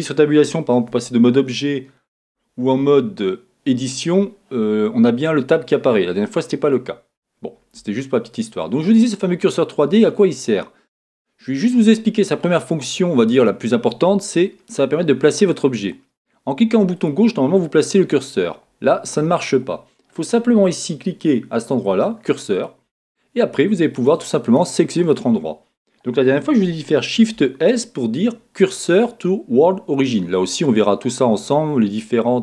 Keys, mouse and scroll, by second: 5.2-15.7 middle drag, 15.7 click, 17.0 click, 22.5 click, 23.4 click, 23.9 click, 24.4 click, 25.0 click, 27.2 shift+s.